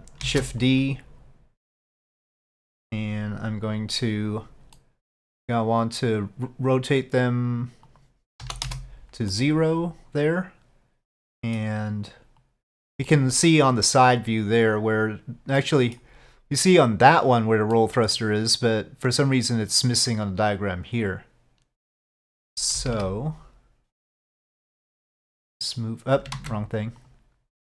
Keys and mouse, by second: 0.3 shift+d, 2.1 click, 3.8 click, 4.9-5.3 middle drag, 8.0-9.1 drag, 9.4-11.7 middle drag, 12.5 click, 13.2-13.5 middle drag, 15.7-16.1 middle drag, 17.8 middle click, 22.8 KP_5, 23.0 KP_1, 25.4 click, 26.5 ctrl+z, 27.1 click.